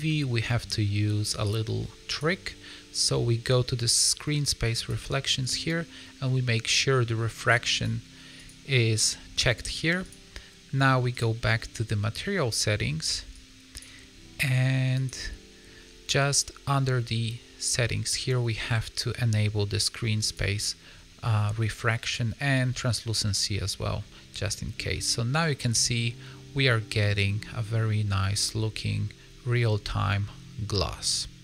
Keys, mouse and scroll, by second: 0.6 middle click, 1.3 click, 4.7 click, 7.7 click, 8.3 click, 10.0 click, 11.0 click, 13.3 click, 14.0-14.9 scroll down 2, 14.9 click, 20.3 click, 21.9 click, 23.4 middle click, 24.9 middle click, 27.1 middle click, 30.3 scroll down 2, 30.6 middle click.